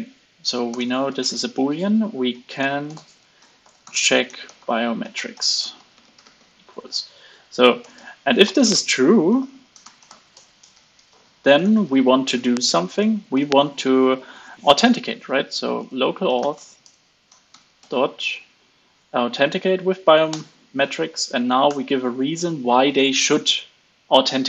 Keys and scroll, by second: 6.7 super+Right, 11.8 alt+8, 12.0 alt+9.